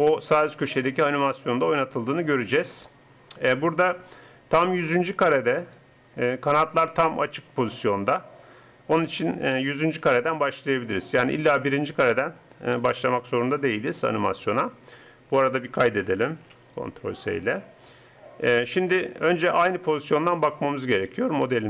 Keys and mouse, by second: 16.3 ctrl+s, 20.3 middle click.